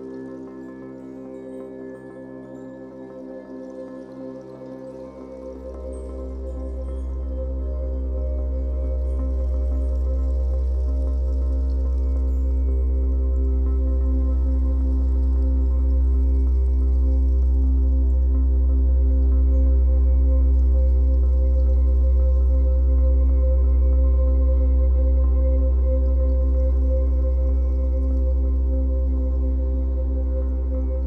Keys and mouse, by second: 0.4 alt+click, 1.1 click, 1.9 click, 3.0 typing, 5.1 shift+click, 6.0 click, 6.9 alt+click, 7.6 click, 8.1 typing, 8.9 click, 10.3 ctrl+alt+click, 10.6 alt+shift+click, 11.8 typing, 12.4 ctrl+alt+click, 12.8 alt+shift+click, 13.5 ctrl+alt+click, 14.3 typing, 14.8 click, 15.1 ctrl+alt+click, 16.1 typing, 18.1 click, 18.7 typing, 19.6 click, 20.4 alt+shift+click, 22.0-23.1 drag, 23.1 typing, 23.7 click, 24.5 typing, 25.7 click, 27.1-27.5 typing, 28.3 click, 28.9 typing, 30.1 click.